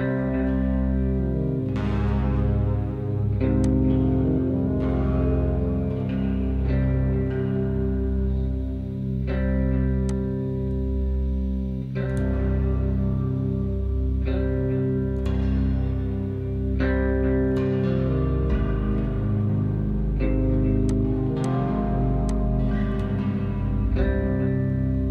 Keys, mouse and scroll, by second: 1.5-2.5 scroll up 2, 5.5-7.4 drag, 11.3-11.7 drag, 11.9-13.3 scroll down 10, 13.3 scroll down 2, 13.4-22.2 middle drag, 22.2-25.1 drag.